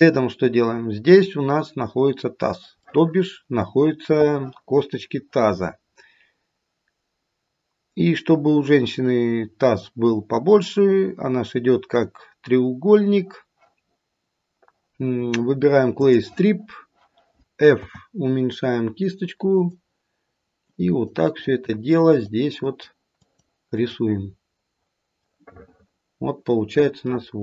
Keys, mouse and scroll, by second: 0.3-2.2 scroll up 1, 2.8 middle click, 16.1 click, 17.8 f, 20.7 click, 21.4 click, 21.9 click, 22.5 click, 23.2 click, 23.8 click, 25.4 middle click, 27.1 middle click.